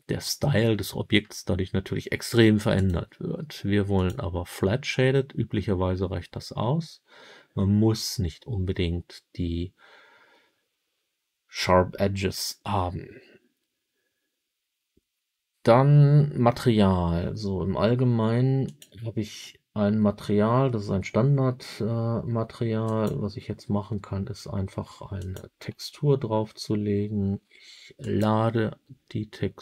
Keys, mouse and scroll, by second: 2.7-4.0 drag, 18.6 click, 22.8-25.3 drag, 27.9 click.